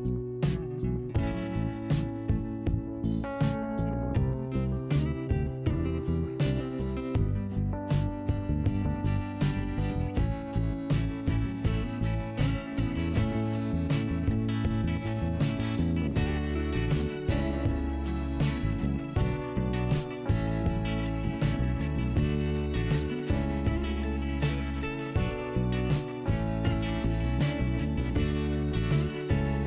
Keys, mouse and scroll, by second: 0.2 scroll up 1, 1.5 click, 2.7 click, 6.7 click, 6.9 click, 7.7-8.1 scroll down 1, 8.4 p, 9.3 click, 13.0 click, 13.1 click, 15.0-15.4 scroll down 1, 15.4 click, 16.7 click, 19.2 click, 20.0 click, 22.3 click, 23.4 i, 25.6 click, 26.5 click, 28.0 scroll up 2, 28.8 click.